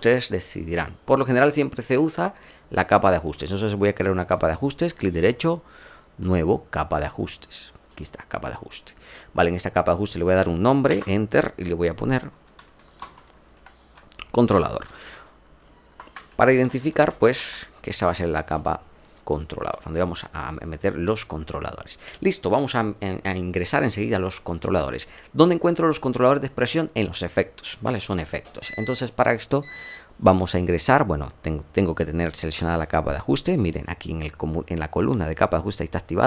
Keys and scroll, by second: 10.8 Return, 12.7-17.7 typing.